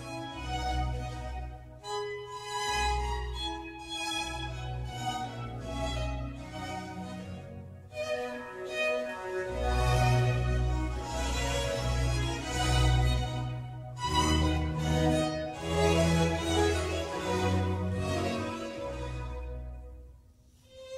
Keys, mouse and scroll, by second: 0.9 shift+a, 4.2 scroll down 1, 4.5-4.9 middle drag, 4.9 s, 9.9-11.4 middle drag, 11.4 g, 14.2 click, 14.5-17.0 middle drag, 17.0 click.